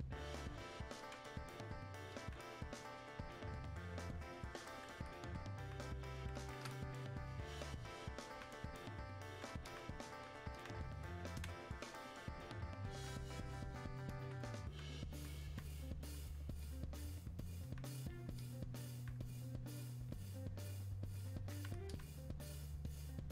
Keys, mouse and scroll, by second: 11.5 space, 12.1 click, 12.2 space, 13.4-23.3 drag.